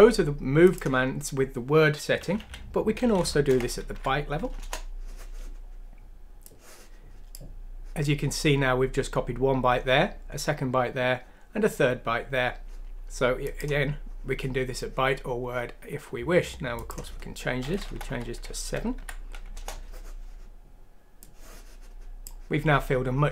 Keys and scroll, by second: 2.4 typing, 3.5 typing, 3.9 F6, 4.6 Return, 17.8 BackSpace, 18.0 7, 18.9 F6, 19.5 Return.